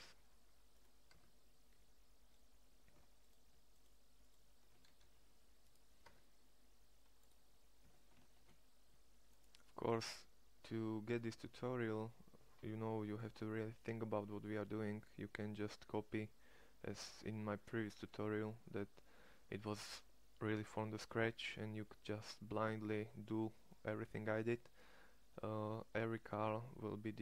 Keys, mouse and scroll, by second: 1.1 Tab, 4.7 shift+s, 6.0 Tab, 7.7 Tab, 8.2 shift+s, 10.9 Tab, 13.7 middle click.